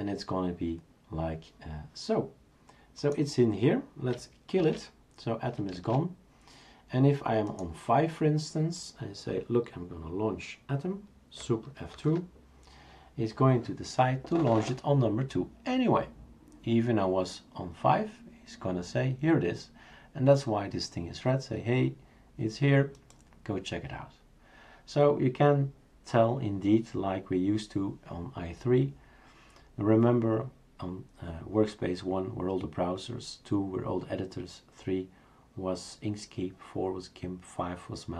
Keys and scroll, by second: 4.6 shift+super+q, 5.7 shift+super+q, 11.9 super+F2.